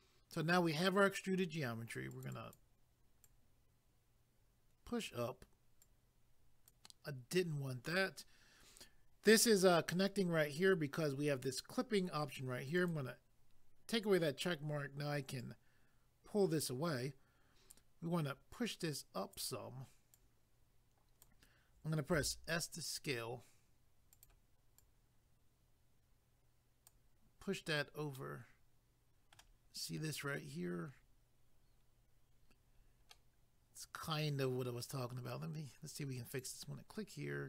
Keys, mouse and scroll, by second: 2.1 click, 2.3 click, 3.2 click, 5.8 click, 12.8 click, 15.4 click, 17.7 click, 20.1 click, 22.1 s, 24.1 click, 33.1 middle click, 36.3 click.